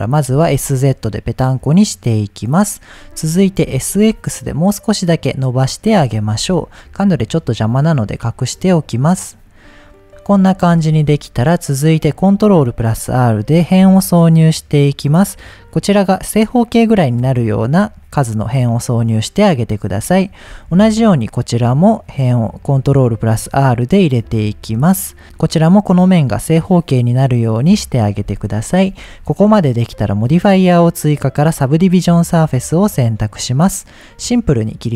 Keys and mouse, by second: 0.3 s, 0.5 z, 2.5 click, 3.1 middle click, 3.7 s, 3.9 x, 5.7 click, 6.3 Tab, 8.7 click, 9.5 click, 9.9-10.5 middle drag, 10.9 Tab, 12.4 ctrl+r, 14.9 right click, 17.7-18.7 middle drag, 19.0 middle click, 20.5 ctrl+r, 24.2 right click, 24.6 middle click, 28.0 middle click, 28.9 Tab, 31.8 Tab, 31.8 click, 34.2 click.